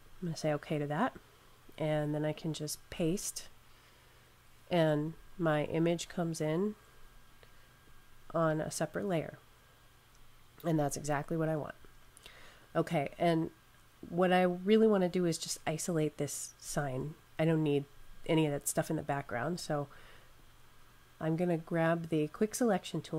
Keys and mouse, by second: 0.0 click, 2.4 super+click, 2.9 super+v, 6.3 click, 20.1 click.